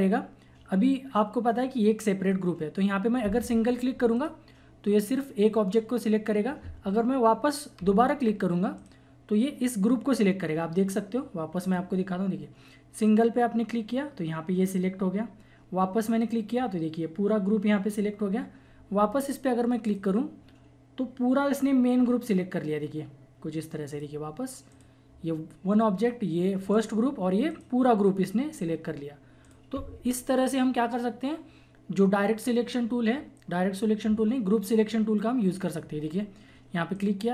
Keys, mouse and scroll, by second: 2.0 typing, 4.1 click, 4.1 typing, 6.7 typing, 8.7 click, 8.7 typing, 11.5 typing, 11.6 click, 15.5 typing, 16.1 click, 18.5 typing, 19.8 click, 19.8 typing, 23.8 click, 23.9 click, 36.9-37.3 drag.